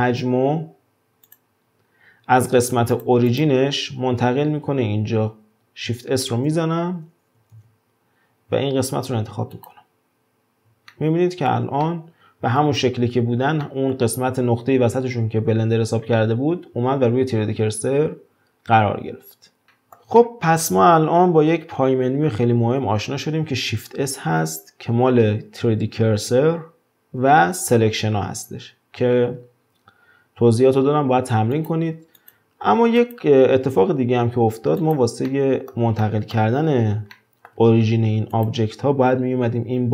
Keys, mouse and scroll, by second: 2.9 click, 3.3 click, 6.2 shift+s, 7.5 shift+s, 10.9-16.7 shift+middle drag, 18.5-19.6 scroll down 2, 19.6-21.0 shift+middle drag, 21.0-23.8 scroll up 1, 23.8 shift+s, 32.2 click, 33.0 click, 34.8 click, 35.2-36.6 middle drag, 36.6-37.1 scroll up 4, 37.1-38.3 shift+middle drag, 38.3 click.